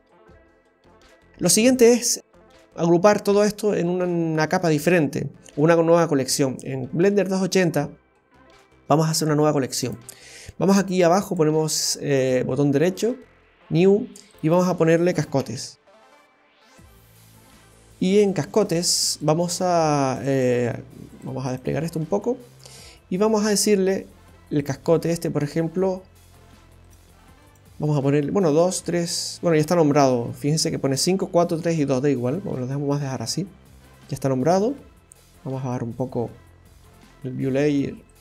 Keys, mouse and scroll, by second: 0.7 Delete, 7.4-8.1 scroll up 1, 9.8 click, 11.2 right click, 14.3 click, 14.4 click, 18.5 click, 19.2 click, 20.2 click, 20.3 click, 21.5 click, 22.4-22.7 scroll down 1, 23.0 scroll down 2, 24.5 click, 24.7 click, 38.1 click.